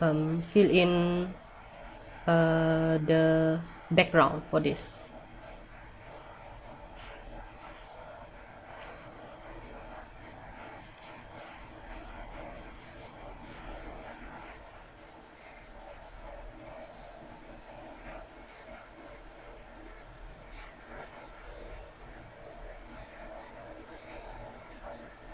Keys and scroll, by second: 0.6 scroll down 1, 5.6 scroll up 1, 17.0 ctrl+z, 22.5 ctrl+z.